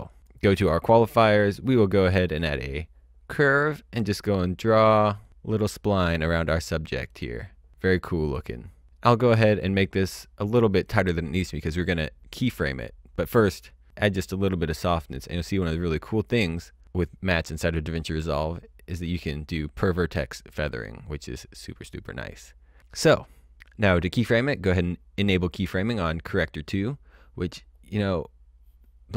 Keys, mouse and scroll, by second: 2.3 click, 3.3-4.0 scroll down 1, 9.1 click, 13.1-21.2 drag, 25.2 click.